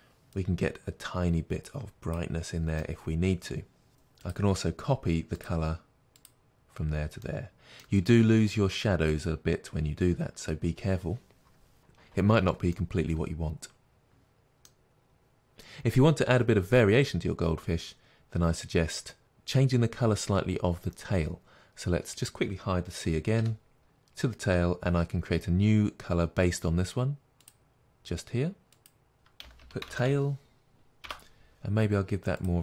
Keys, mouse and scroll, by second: 2.9-6.2 middle drag, 6.2 click, 7.3-19.2 middle drag, 8.1-10.0 scroll up 2, 10.0-11.6 scroll up 1, 11.6 scroll up 1, 11.8-12.8 scroll down 2, 16.0-19.2 scroll up 2, 19.2 click, 21.4 scroll down 1, 23.5 h, 23.8 click, 28.9-32.6 drag, 31.2 Return.